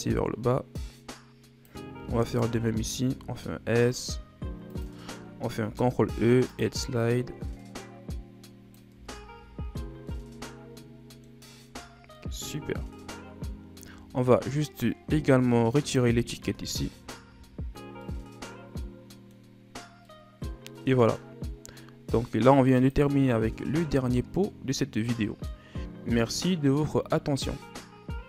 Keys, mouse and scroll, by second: 2.1 alt+right click, 2.9 s, 5.6 ctrl+e, 8.9 Tab, 9.2 a, 9.6 a, 9.8 scroll down 4, 10.0-11.4 middle drag, 11.4-11.9 scroll down 5, 12.1 middle click, 12.7 scroll up 1, 12.8 scroll down 1, 13.0-14.0 scroll up 1, 14.0 scroll down 4, 14.4-15.7 scroll up 2, 15.7 right click, 17.2 Delete, 17.7 scroll down 2, 18.0-21.5 middle drag, 21.5-22.7 scroll down 4, 22.7 click.